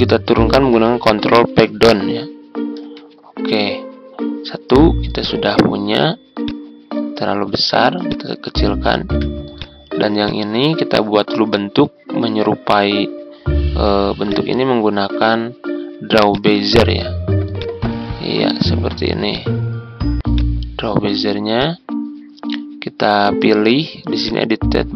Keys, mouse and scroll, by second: 1.9 ctrl+Page_Down, 5.1-7.9 drag, 10.7-11.0 ctrl+scroll up 1, 14.2-24.9 drag.